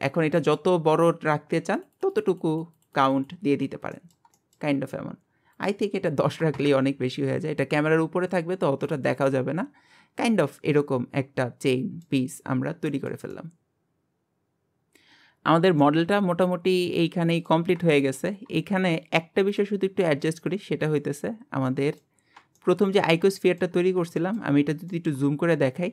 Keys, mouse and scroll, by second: 0.1 scroll down 1, 0.3-1.8 shift+middle drag, 1.8-3.5 drag, 3.5-3.9 scroll down 3, 3.9-5.5 shift+middle drag, 5.5-8.1 drag, 8.1-8.8 scroll up 1, 8.8 click, 9.2-12.3 middle drag, 12.3-12.9 scroll up 2, 12.9-14.9 shift+middle drag, 15.8-17.7 middle drag, 17.7 scroll up 1, 18.0 shift+middle click, 18.5 scroll up 2, 18.9 shift+middle click, 19.8-20.4 scroll up 1, 20.4 click, 20.8 scroll down 1, 21.6 middle click, 22.2 scroll up 2, 22.5 shift+middle click, 23.0-23.3 scroll up 1, 23.3 shift+middle click, 23.8-25.9 scroll up 7, 24.2 shift+middle click, 24.9 shift+middle click.